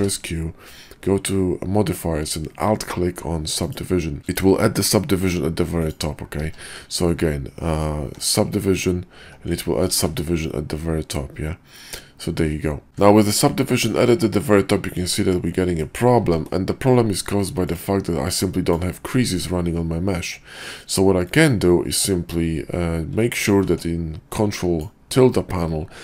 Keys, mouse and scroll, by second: 4.2 ctrl+z, 4.2 click, 5.7 click, 6.4 q, 9.9 ctrl+`, 12.9 q, 13.9-15.0 middle drag, 15.6 middle drag, 16.2 ctrl+`, 21.8 q, 23.5 ctrl+`.